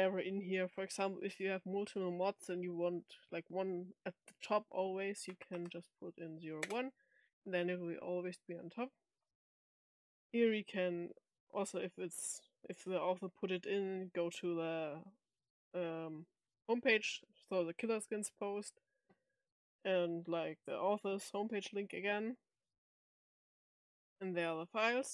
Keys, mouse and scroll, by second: 11.2 click, 19.3 click, 23.7 click.